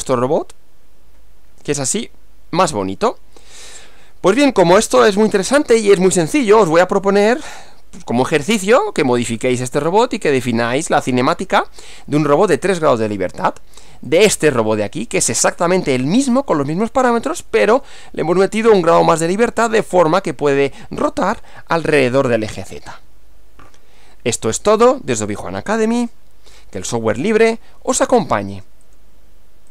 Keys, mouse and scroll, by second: 5.2 click, 6.7 Right, 9.5 middle click, 10.6-12.5 drag, 14.1-15.6 drag, 28.9 click.